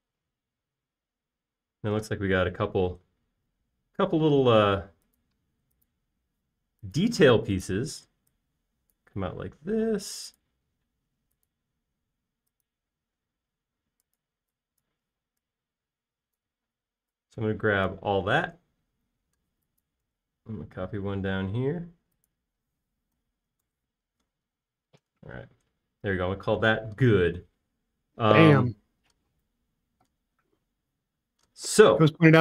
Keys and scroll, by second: 3.7 l, 9.8 p, 11.3 typing, 15.8-16.9 typing, 18.0 typing, 19.7 m, 24.7-25.8 typing.